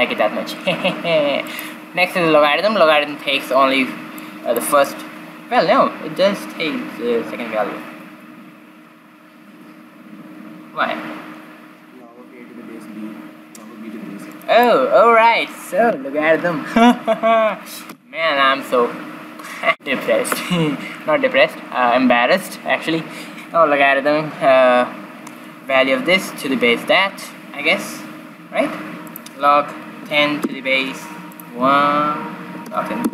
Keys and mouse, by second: 4.1-6.6 drag, 6.7 click, 29.0-30.8 drag, 31.2-33.1 drag.